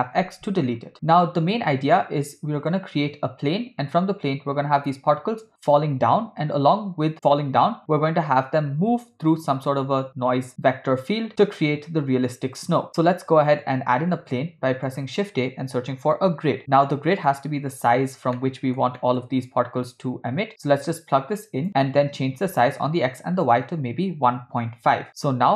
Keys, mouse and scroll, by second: 0.2 x, 0.9-2.8 middle drag, 14.0 shift+a, 18.4 ctrl+middle click, 19.0 middle click, 20.5-21.7 drag, 23.1-25.1 shift+drag.